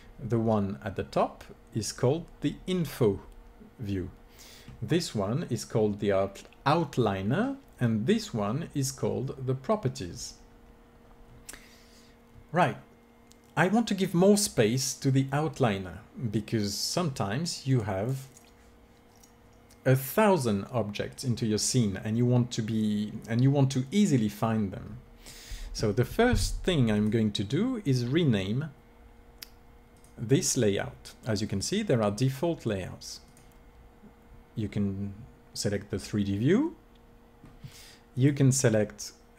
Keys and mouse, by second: 26.8-28.7 drag, 31.4-33.3 drag, 38.5 click.